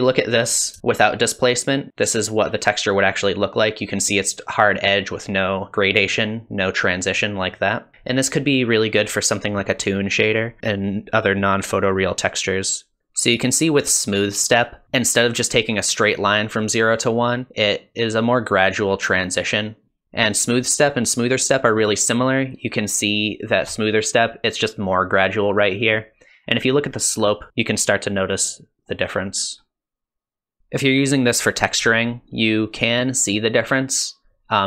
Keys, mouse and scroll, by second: 0.2 scroll up 1, 0.8 shift+middle click, 7.5 middle click, 20.0-21.4 ctrl+scroll down 1, 21.4 ctrl+scroll down 1, 22.2 ctrl+scroll up 1, 23.0 ctrl+scroll down 1, 27.5-27.9 ctrl+scroll down 1, 28.6 ctrl+scroll down 1, 29.5 ctrl+scroll up 1, 30.2 ctrl+scroll down 1, 32.2 ctrl+scroll down 1, 33.1 ctrl+scroll up 1, 33.6-34.3 ctrl+scroll down 1.